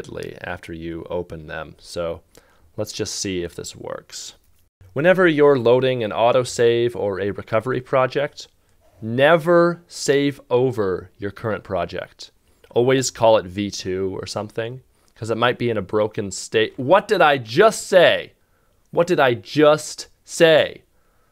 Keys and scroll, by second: 3.0 shift+`, 4.2 shift+v, 4.5 2, 7.8 Return.